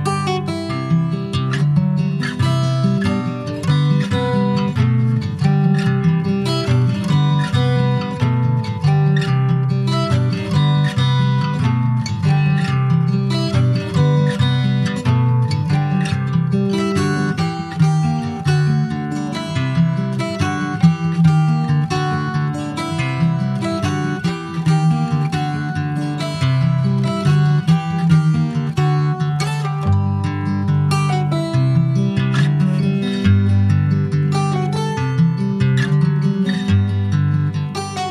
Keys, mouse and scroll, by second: 0.3 ctrl+s, 0.7 click, 1.3 /, 1.8 middle click, 2.2 Tab, 2.5 middle click, 2.9 scroll up 1, 3.1 2, 3.8 click, 4.7 alt+shift+click, 5.2 middle click, 5.8 ctrl+b, 7.9 Tab, 8.4 ctrl+a, 9.0 click, 9.4 Tab, 10.5 ctrl+b, 12.2-13.8 middle drag, 13.8 click, 14.4-15.1 scroll up 1, 15.2-17.1 drag, 17.1 middle click, 17.9 scroll up 1, 18.2-20.1 shift+middle drag, 20.1-23.2 drag, 23.2 middle click, 23.7 /, 24.4-24.9 scroll up 4, 24.9 middle click, 25.5-27.3 shift+middle drag, 27.3 Tab, 27.4 click, 27.6-27.9 scroll down 4, 27.9 middle click, 28.3 click, 28.5-30.9 right drag, 30.9 click, 31.9 click, 32.5-32.9 scroll down 1, 32.9 ctrl+s, 33.0 click, 33.3 shift+middle click, 33.5 shift+scroll up 1, 33.6 scroll down 3, 33.9-35.6 middle drag, 35.6 click, 35.8 Tab, 36.1 middle click, 36.8 click, 37.2 middle click, 37.4-38.1 scroll up 5, 37.8 shift+middle click.